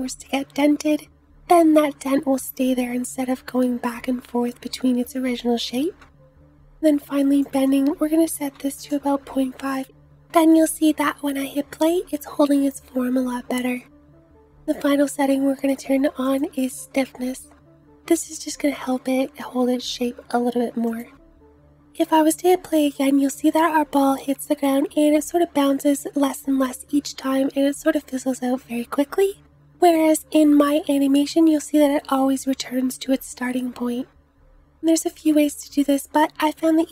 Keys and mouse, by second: 10.8 space, 12.7 space, 14.5-16.3 drag, 16.5-21.0 drag, 21.9-30.2 drag, 21.9-30.2 middle drag, 21.9-30.2 right drag, 21.9 space, 30.2 space.